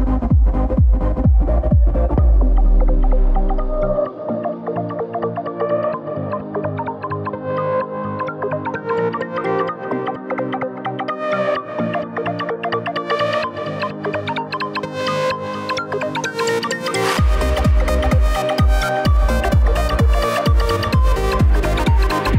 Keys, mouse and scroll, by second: 5.4-22.3 right drag.